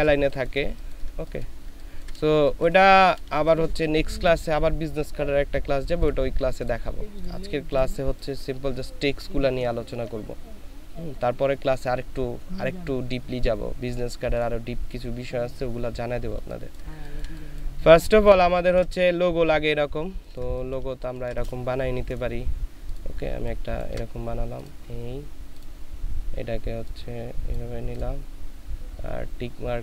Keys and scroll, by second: 0.5 ctrl+space, 1.6 ctrl+space, 2.3 ctrl+space, 16.2 ctrl+space, 16.7 ctrl+space, 17.8 ctrl+space, 20.1 ctrl+space, 20.9 ctrl+space.